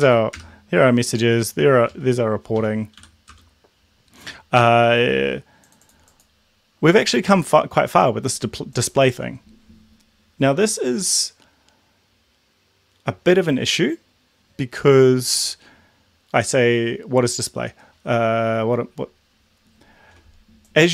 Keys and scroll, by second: 0.1 Up, 0.3 BackSpace, 1.8 Down, 2.6 Up, 2.9 End, 3.3 Return.